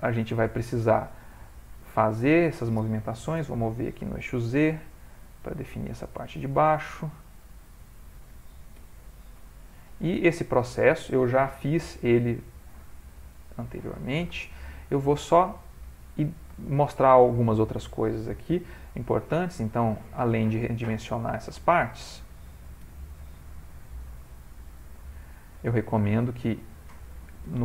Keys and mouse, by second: 0.0 shift+middle click, 0.3 ctrl+middle click, 0.5 ctrl+middle click, 1.3 click, 3.4 g, 6.3 click, 6.6 g, 7.7 click, 8.8 g, 10.5 click, 11.0 g, 13.5 click, 14.5-16.8 shift+middle click, 16.6 shift+middle click, 18.3 g, 20.8 click, 22.8 g, 26.9 click.